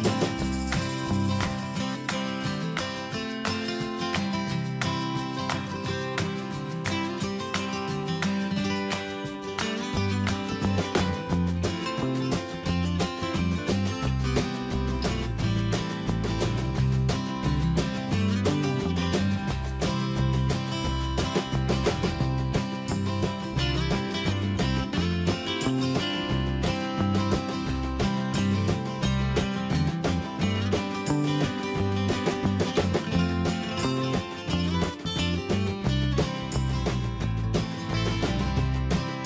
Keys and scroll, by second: 0.7 Return, 1.7 ctrl+t, 4.7 ctrl+z, 8.2 Return, 18.5 Return, 21.3 ctrl+[, 35.6 Return.